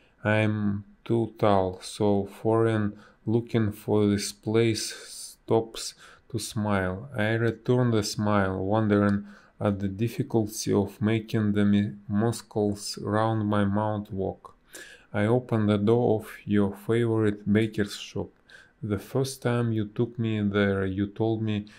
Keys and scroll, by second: 0.5 space, 3.8 space, 14.4 space, 16.9 b, 18.4 space, 19.6 space, 21.3 space.